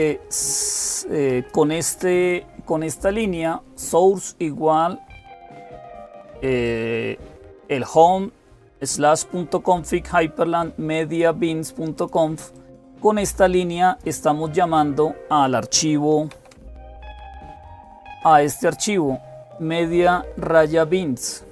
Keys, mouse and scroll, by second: 11.7-14.9 drag, 15.7-16.6 typing, 19.8-21.5 drag.